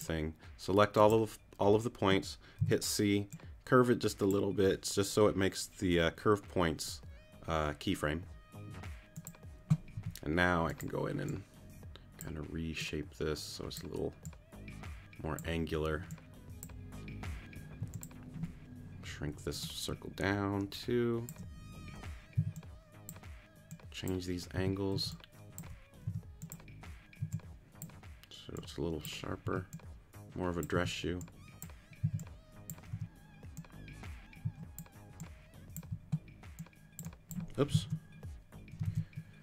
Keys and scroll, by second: 2.6 shift+c, 10.0 t, 17.8 t, 22.4 alt+shift+c, 23.2 c, 24.6 t, 24.9 c, 26.7 t, 27.4 c, 29.4 t, 30.7 t, 32.0 c, 33.9 t, 34.4 c, 38.1 super+z.